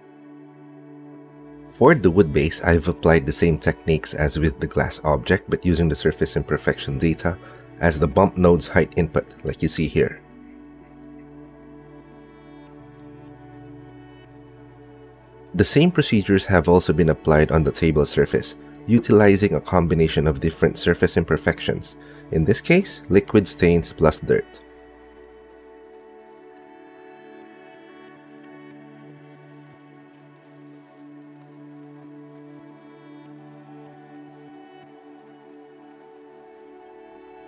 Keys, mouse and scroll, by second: 1.0 click, 2.7 KP_Divide, 4.2 click, 5.2 alt+shift+z, 7.4 click, 8.3 middle click, 9.2 middle click, 11.3 middle click, 13.4 middle click, 15.4 middle click, 16.5 middle click, 17.6 KP_Divide, 18.7 click, 19.5 KP_Divide, 20.4 middle click, 21.4 click, 21.8 click, 25.7 ctrl+shift+click, 27.9 ctrl+shift+click, 28.8 middle click, 29.2 click, 31.4 middle click, 32.4 ctrl+space, 33.3 click, 34.6 shift+click, 34.8 middle click, 35.0 middle click, 35.9 click.